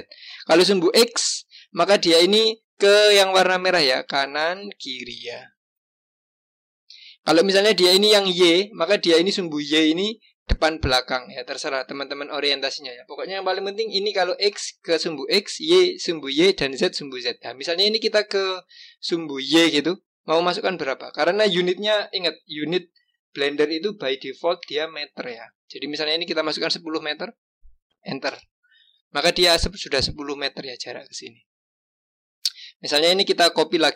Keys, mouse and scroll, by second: 32.3 click.